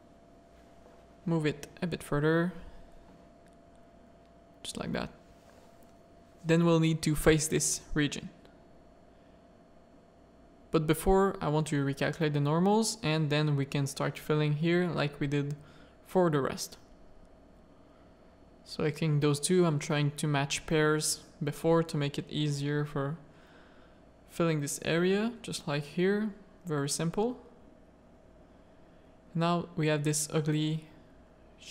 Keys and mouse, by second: 0.0-1.1 drag, 1.3 a, 2.1-3.8 drag, 5.0 alt+click, 5.4 middle click, 6.1 shift+middle click, 6.8 middle click, 7.3 shift+middle click, 7.6 middle click, 8.4 shift+middle click, 8.7 z, 9.0 a, 9.8 shift+n, 11.0 middle click, 11.6 2, 12.0 f, 12.2 middle click, 13.5 click, 13.7 f, 14.0 a, 14.2 middle click, 15.2 1, 15.7 click, 16.8 click, 17.3 2, 19.3-21.1 typing, 21.2 middle click, 22.1 ctrl+r, 22.9-27.3 typing, 23.6 click, 24.9 middle click, 25.7 click, 26.8 Tab, 27.0 middle click, 28.0 Tab, 28.2 middle click, 28.7 1, 29.3 click, 30.3 3, 30.5 click.